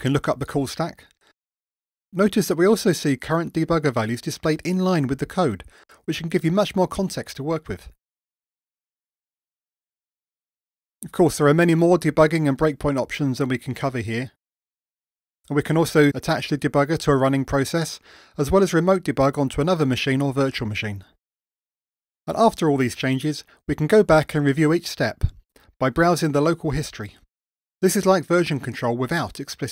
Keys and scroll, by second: 21.9 super+F2.